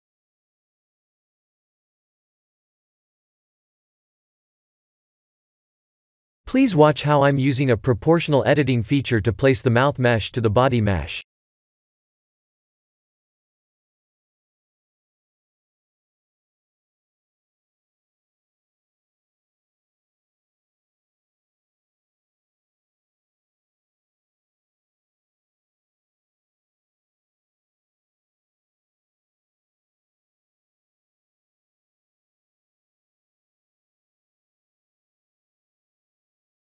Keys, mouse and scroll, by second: 0.4 middle click, 1.0 KP_1, 2.6 click, 2.9 right click, 3.8 middle click, 6.3 Tab, 7.5 click, 8.3 middle click, 10.7 click, 11.4 scroll down 1, 12.6 click, 12.6 scroll down 2, 23.6 middle click, 24.8 KP_1, 25.3 KP_7, 26.3 KP_1, 27.3 middle click, 28.7 KP_7, 32.0 click.